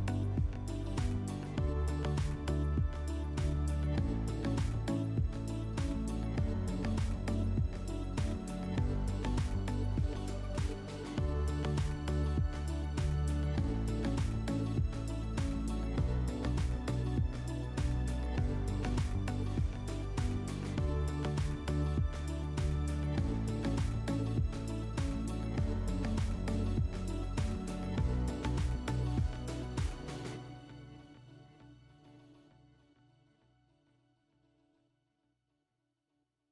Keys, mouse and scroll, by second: 0.6-1.3 right drag, 2.8 click, 5.9 click, 7.1 alt+w, 8.4 click, 10.7 click, 11.9 right click, 12.1 right click, 12.7 click, 14.0-14.4 typing, 15.2 Return, 15.6 typing, 16.4 click, 18.4 shift+click, 19.6 alt+w, 22.1 alt+middle click, 22.7 middle click, 24.9 r, 29.0 shift+click, 31.3 q, 32.9 click, 34.6 click.